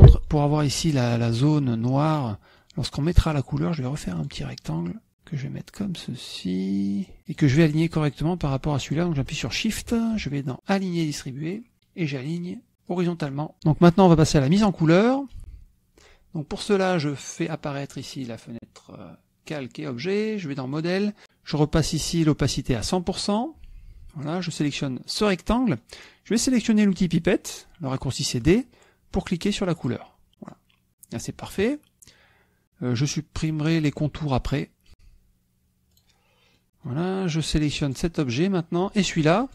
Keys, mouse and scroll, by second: 0.9 click, 1.5 click, 3.4 click, 5.0 click, 5.2 click, 8.1 click, 10.3 shift+click, 11.7 click, 13.5 middle drag, 15.7 click, 18.8 click, 21.2 click, 23.3 right click, 24.1 click, 25.5 click, 26.2 click, 29.3 click, 30.6 click, 31.3 middle click, 31.6 click, 36.8 click, 37.5 middle click, 38.8 click.